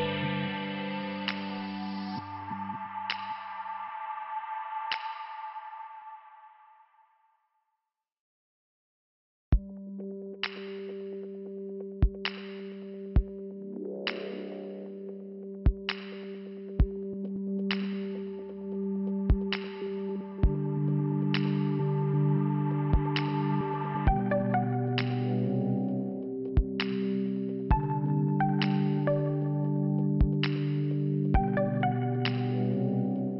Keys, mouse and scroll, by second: 0.0 click, 0.1 click, 1.6 click, 1.7 click, 3.7 click, 5.8 click, 8.7 click, 8.8 click, 10.2 click, 12.0 click, 12.7 click, 12.8 click, 13.9 click, 14.0 click, 14.6 click, 17.4 click, 20.0 click, 21.3 scroll down 1, 23.9 scroll down 1, 24.9 middle click, 26.0 click, 27.3 scroll down 1, 27.6 scroll up 1, 29.8 click, 29.9 click, 31.0 click, 31.1 click, 31.3 click, 31.4 click.